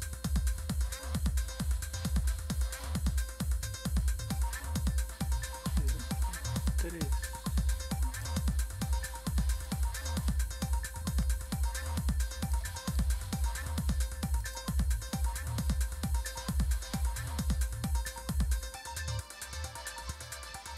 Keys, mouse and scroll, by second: 3.2-5.9 drag, 6.7-8.3 drag, 9.7-12.6 drag, 13.0 right click, 14.4 click, 14.9-17.2 scroll down 3, 17.2-18.9 scroll down 2, 18.9-19.6 scroll down 1, 19.6-20.7 scroll down 1.